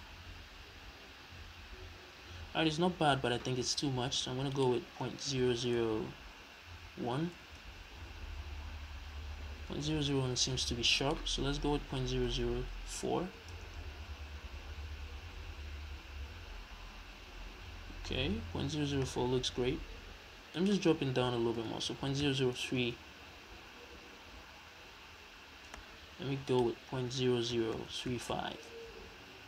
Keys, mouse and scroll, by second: 4.5-22.0 drag, 5.9 KP_0, 7.6 Return, 12.4 KP_0, 13.7 Return, 22.0 KP_0, 22.8 Return, 26.5 click, 27.6-29.4 drag, 27.9 KP_0, 28.9 Return.